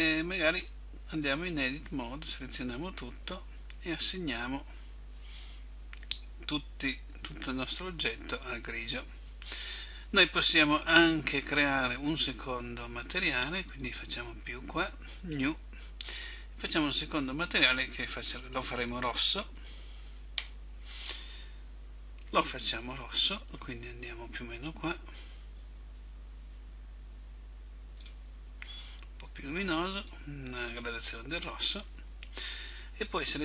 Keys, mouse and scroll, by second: 0.8 Tab, 2.4 a, 4.4 click, 14.0 click, 15.3 click, 17.4 click, 22.4 click.